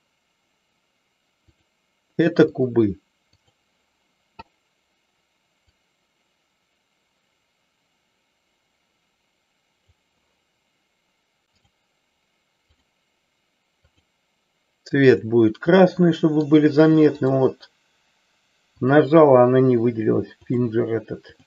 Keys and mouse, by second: 1.4-2.7 drag, 3.3 click, 5.7-9.8 drag, 11.6 click, 12.8-14.0 drag, 15.1 click, 15.8 middle click, 17.1-18.2 drag, 18.7-20.7 drag, 21.3 click.